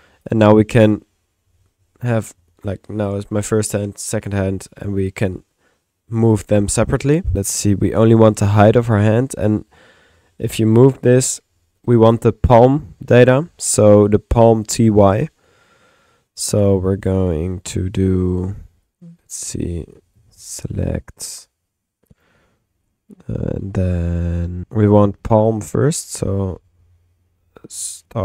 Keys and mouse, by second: 0.5 middle click, 7.3 click, 17.4 middle click, 17.7 click, 18.3-20.7 typing, 18.9-20.2 drag, 19.8 Tab, 21.4 click, 22.3 click, 22.9 click, 23.8 click, 24.1 click.